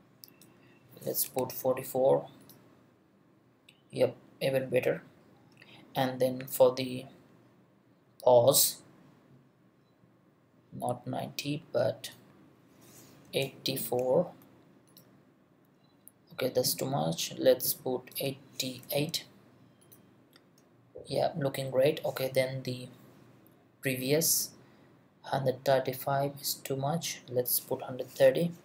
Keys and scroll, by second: 1.3 4, 13.3 8, 13.8 4, 18.8 8, 28.3 0.